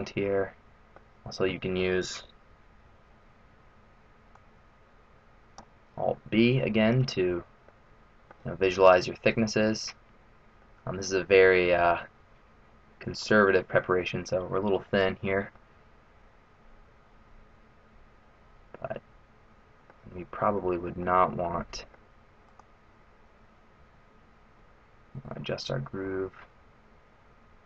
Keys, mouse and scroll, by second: 1.1-1.6 scroll down 2, 1.6 middle click, 2.9 alt+b, 6.4 middle click, 6.9 scroll down 1, 7.2-7.9 scroll up 3, 7.7 middle click, 10.5 middle click, 15.6 middle click, 20.6 middle click, 22.5 middle click, 22.5 right click, 23.7 g.